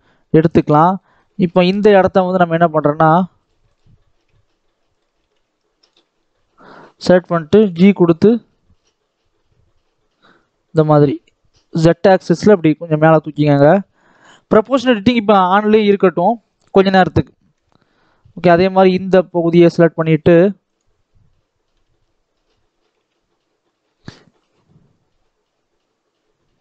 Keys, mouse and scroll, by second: 0.1 middle click, 0.6 scroll up 1, 0.8 middle click, 1.5-2.4 scroll up 1, 2.4 click, 2.9 alt+a, 3.2 click, 3.5 shift+click, 4.8 click, 5.1 alt+a, 5.7 alt+click, 6.0-7.5 middle drag, 7.5 g, 13.0-14.0 scroll down 1, 14.0 Tab, 14.2 middle click, 15.0 right click, 15.7-17.4 middle drag, 17.4 KP_3, 17.8-18.2 scroll up 2, 18.2 Tab, 18.4 shift+middle click, 19.1-19.9 scroll up 2, 19.9 click, 21.6 KP_3, 22.8 g.